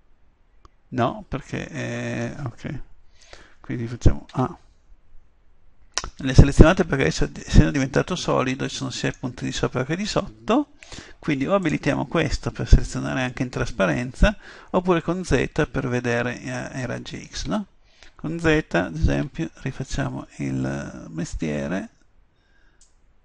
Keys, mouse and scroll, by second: 1.5-3.0 middle drag, 3.1 KP_7, 4.4 a, 6.4 middle click, 6.6 middle click, 10.1-11.7 middle drag, 11.7-13.8 drag, 13.8 middle click, 15.0 z, 16.8 z, 17.5 z, 19.2 b.